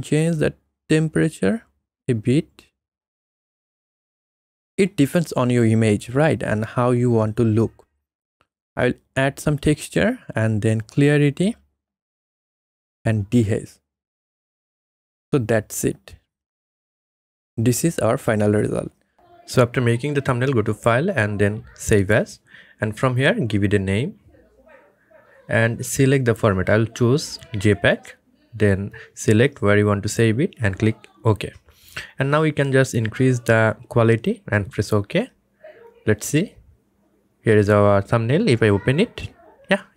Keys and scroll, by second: 23.5-25.2 typing.